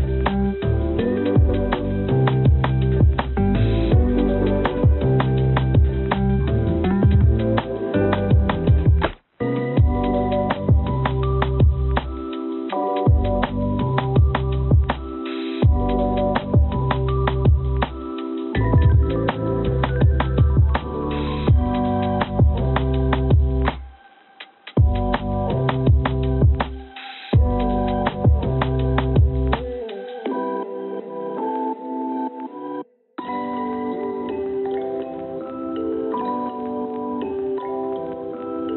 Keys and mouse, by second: 0.9 click, 14.3 click, 15.7 n, 17.1 click, 24.4 middle click, 25.3-27.0 middle drag, 27.6 ctrl+z, 28.1 ctrl+z, 34.1-35.3 middle drag.